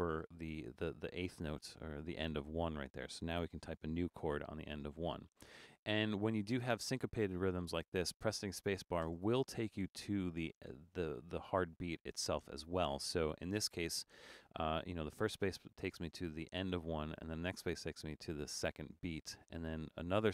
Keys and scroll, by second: 3.6 shift+g, 4.0 7, 9.1 space.